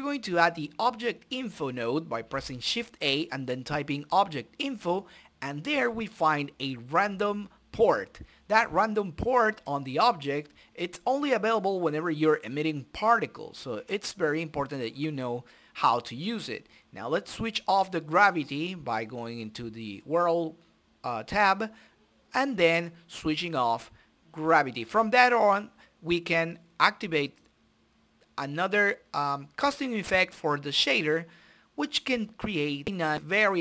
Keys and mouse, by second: 0.8-2.0 drag, 3.9-5.0 drag, 4.8-6.0 right drag, 5.8 middle click, 9.2 click, 9.4 middle click, 9.8 right click, 10.0 click, 11.0 middle click, 11.6-12.6 right drag, 12.6 middle click, 13.2-14.2 drag, 14.8 click, 16.0-17.1 drag, 17.7 click, 20.1-21.4 drag, 21.0 middle click, 21.5 click, 21.7 shift+a, 23.4 click, 25.5-26.7 drag, 26.0 shift+a, 27.0 BackSpace, 28.5 click, 29.9 middle click, 30.4-31.5 drag, 30.9 Delete, 31.0 shift+a.